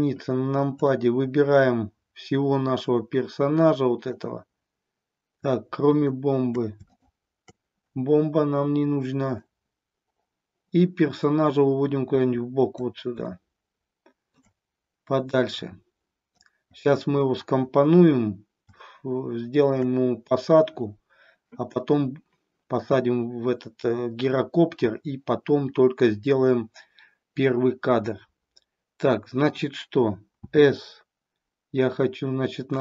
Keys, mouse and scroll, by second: 0.8-4.1 drag, 5.8 shift+click, 6.8 shift+click, 9.3-12.9 drag, 13.3-14.5 shift+middle drag, 15.2-16.4 drag, 18.7-19.8 shift+middle drag, 30.4 s.